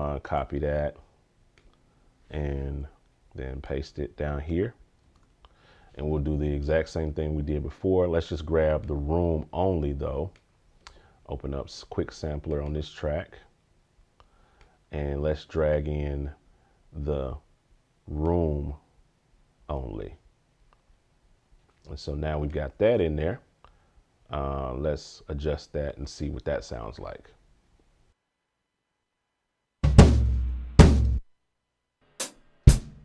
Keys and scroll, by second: 0.3 super+c, 5.0 super+v.